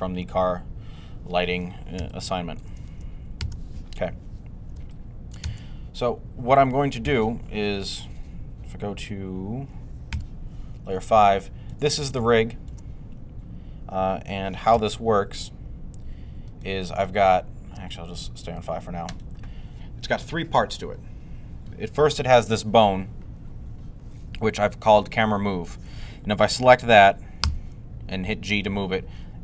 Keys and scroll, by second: 1.8 z, 3.2 z, 6.9 typing, 9.1-10.0 typing, 27.2 g.